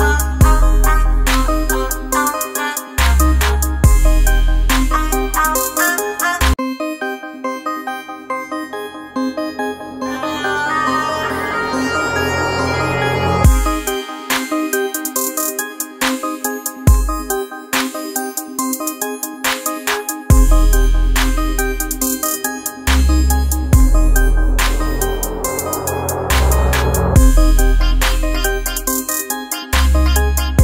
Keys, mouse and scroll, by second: 1.9 space, 2.5-3.8 ctrl+drag, 3.8-6.1 drag, 6.9 right click, 8.0 click, 9.1-19.8 shift+drag, 20.4-23.2 drag, 25.5 right click, 26.7-30.6 drag.